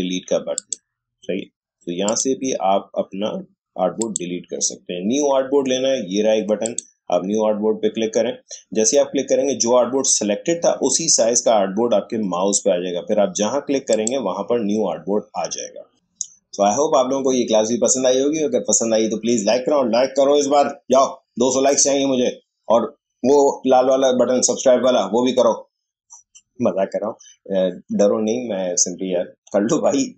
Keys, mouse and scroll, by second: 0.5 click, 6.6 click, 13.9 click.